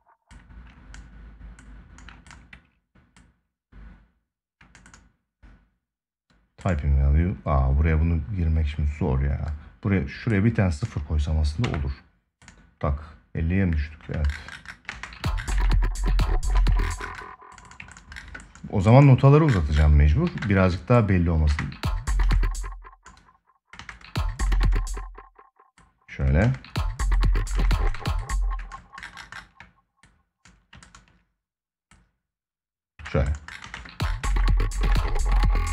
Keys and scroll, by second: 14.7 space, 15.3 ctrl+s, 16.3 space, 20.0 ctrl+s, 21.2 space, 23.5 space, 26.2 space, 33.3 ctrl+space.